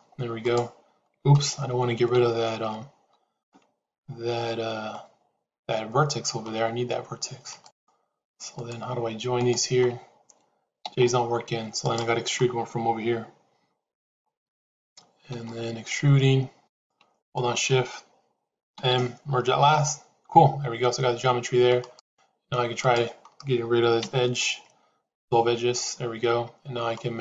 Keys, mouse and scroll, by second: 0.4 click, 1.3 ctrl+z, 2.1 ctrl+z, 3.4-4.9 middle drag, 7.5 click, 9.3 shift+click, 10.7 j, 11.7 click, 15.3 e, 17.1 shift+click, 18.6 m, 21.9 click, 23.9 x.